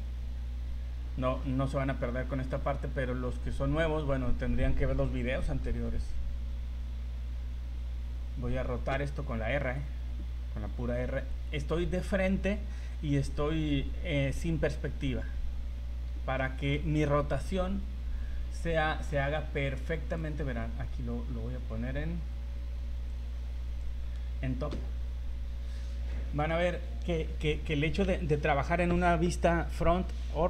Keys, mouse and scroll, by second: 8.0 r, 16.4 shift+middle click, 17.6 r, 19.4 click, 23.1 click, 24.0-24.5 scroll down 4, 24.7 KP_7, 25.3-25.9 scroll up 3, 26.2 shift+middle click.